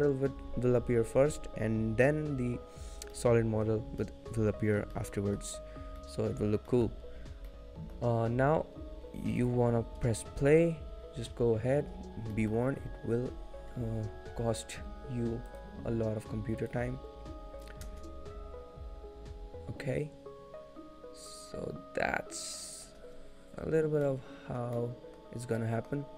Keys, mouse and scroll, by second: 3.2 middle click, 4.7 shift+middle click, 5.4 middle click, 6.2 middle click, 6.2-6.9 scroll up 1, 6.9 shift+middle click, 7.2-7.7 scroll down 2, 7.7 middle click, 9.6 click, 12.5 middle click, 12.5-14.2 scroll down 1, 15.6 click, 16.8 click, 17.9 space, 24.3 middle click, 24.3 space, 24.9 middle click.